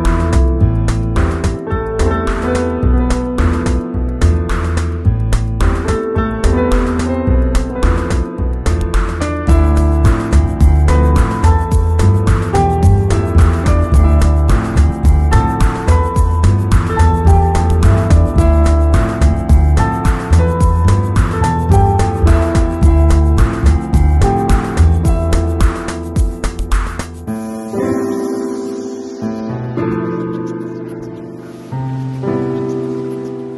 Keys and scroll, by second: 1.3 super+i, 2.9 b, 7.0 3, 7.5 [, 10.3 ], 12.3 [, 13.5 ], 15.2 [, 18.2 ], 21.0 c, 21.5 v, 24.8 super+l, 28.4 Return, 32.6 m.